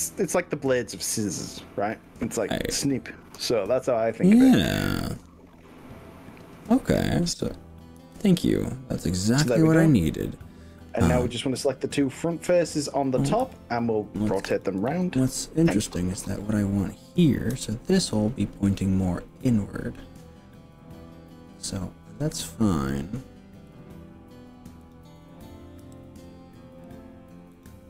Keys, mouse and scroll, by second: 0.2-5.9 middle drag, 8.0 KP_3, 12.1 click, 13.5 g, 14.7 click, 15.0 ctrl+z, 16.3 click, 17.5 g, 23.7 click, 24.9 click, 25.9 g, 26.9 click, 27.7 click.